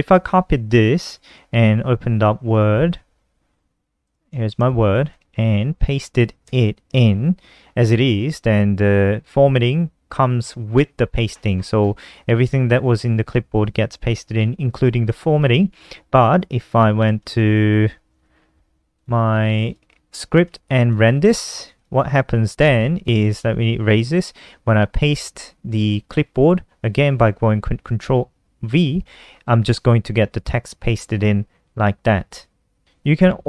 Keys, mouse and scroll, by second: 0.4 ctrl+c, 1.1-2.2 typing, 3.3 click, 3.8 shift+super+Left, 5.7 ctrl+v, 16.3 click, 18.3 click, 18.7-19.5 typing, 19.8 ctrl+s, 20.2 F5, 21.1 click, 21.7 shift+super+Left, 22.4 click, 22.7 ctrl+a, 23.1 Delete, 27.5 ctrl+v.